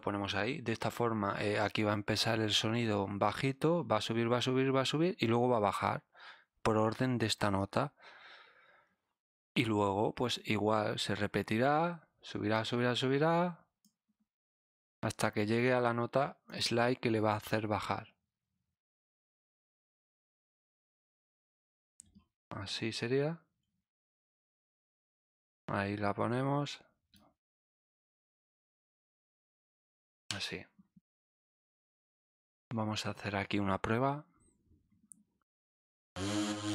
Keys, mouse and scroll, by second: 12.5-13.8 drag, 15.0 click, 16.4 click, 17.3 click, 19.2-21.7 drag, 22.1-22.8 scroll down 2, 24.4-25.5 drag, 27.1-28.2 drag, 28.2 click, 28.8 right click, 29.6-30.2 scroll down 2, 32.0 click, 35.9 click.